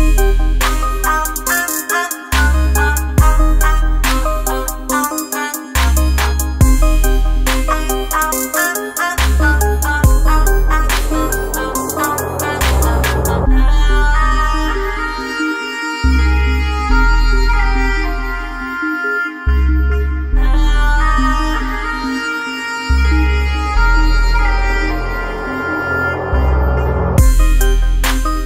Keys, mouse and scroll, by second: 0.6 click, 5.0-15.0 drag, 20.8 click, 26.7 click.